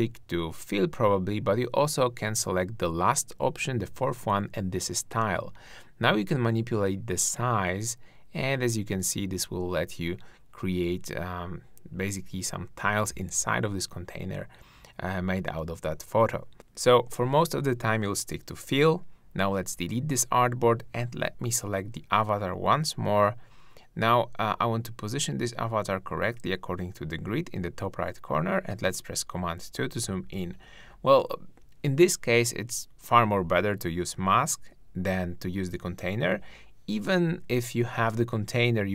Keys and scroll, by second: 24.2 shift+Down, 24.8 shift+Right, 25.2 shift+Left, 26.1 shift+Right, 26.6 shift+Left, 27.0 shift+Down, 27.9 super+Down, 28.1 super+2, 32.3 super+-.